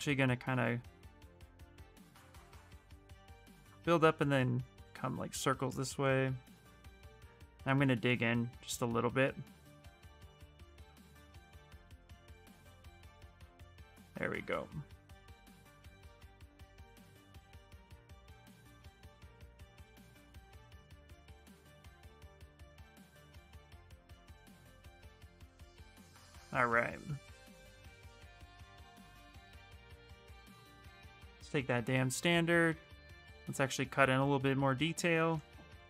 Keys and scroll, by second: 6.5 s, 20.4 f, 30.9-32.1 typing.